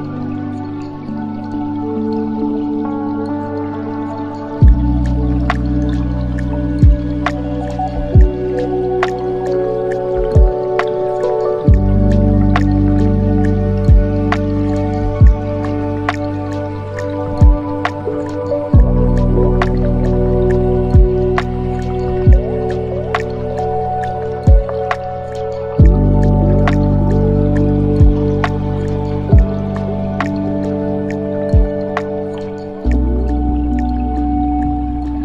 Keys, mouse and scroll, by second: 3.7-4.5 scroll down 2, 4.5 click, 4.9-6.2 scroll down 5, 6.2-8.3 scroll down 12, 8.3-11.5 drag, 11.5 space, 14.3 click, 19.7 space, 20.6-22.3 scroll up 9, 22.3-25.4 drag, 26.3-26.8 drag, 26.8 space, 31.0 space, 31.9-32.7 scroll up 2, 32.8-34.1 scroll up 13, 34.7-35.2 drag.